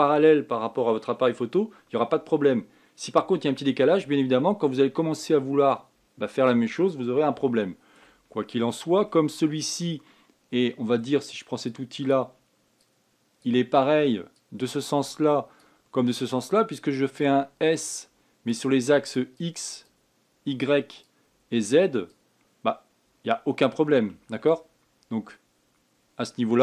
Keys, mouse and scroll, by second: 5.4-5.9 scroll down 3, 5.9-8.2 scroll up 4, 8.2 shift+middle click, 9.0-9.8 scroll down 1, 9.8-12.4 shift+middle drag, 12.4-26.6 drag.